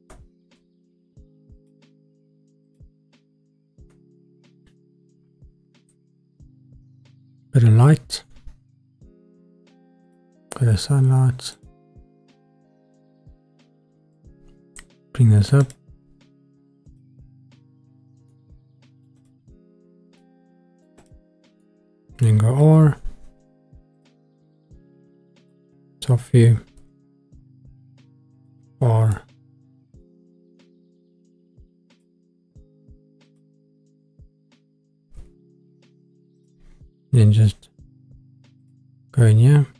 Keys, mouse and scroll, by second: 2.6 click, 3.9 shift+a, 11.5 click, 13.8 g, 14.1 middle click, 15.6 click, 16.8 click, 18.1 g, 18.3 middle click, 19.2 click, 20.0 g, 20.2 click, 20.2 middle click, 20.8 scroll up 1, 21.0 click, 21.6-22.4 middle drag, 22.7 r, 24.0 click, 25.4 click, 26.8 r, 28.3 click, 29.1-30.2 middle drag, 30.6 r, 31.9 click, 33.3 click, 35.1 r, 36.4 click, 38.8 click.